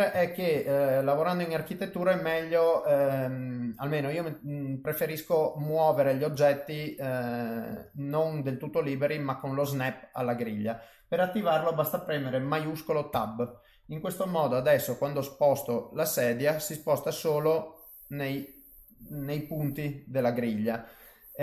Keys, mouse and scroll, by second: 0.2 ctrl+middle click, 0.6 middle click, 2.7 middle click, 4.6 middle click, 6.3 click, 6.7 click, 7.2 click, 8.8 click, 9.3 middle click, 13.1 shift+Tab, 14.5 g.